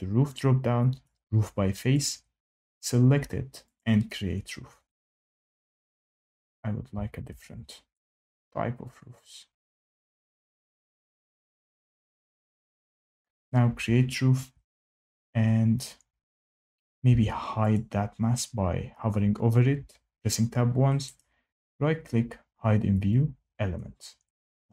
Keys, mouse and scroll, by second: 1.0 click, 2.1 click, 3.7 click, 7.2 ctrl+z, 8.0 click, 9.8 click, 11.0 click, 12.0 click, 14.3 Escape, 17.0 Tab, 17.7 click, 21.1 right click, 23.0 click.